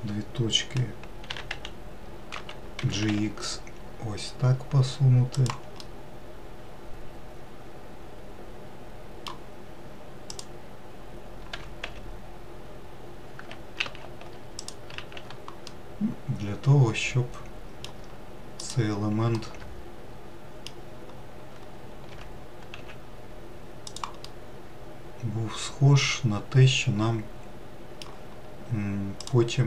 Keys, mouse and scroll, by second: 0.2 shift+click, 1.9 f, 2.1 x, 3.4 g, 6.5-9.5 middle drag, 10.9 click, 12.2 g, 15.6 alt+z, 16.3-19.2 middle drag, 19.2 click, 20.0 alt+middle click, 22.7 g, 24.9-28.0 middle drag.